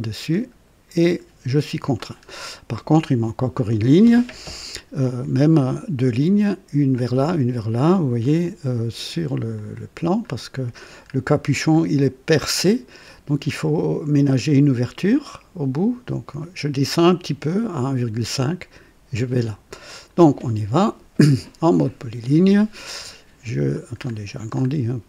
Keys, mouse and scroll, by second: 0.6 scroll up 1, 1.1-1.7 right drag, 1.9 right click, 1.9 typing, 2.3-2.7 scroll up 1, 3.0-3.7 right drag, 4.2 typing, 8.2 click, 9.6 click, 10.3 scroll up 1, 11.3 scroll down 2, 12.0 scroll down 2, 19.8 click, 21.8 click, 24.0-24.8 scroll up 4.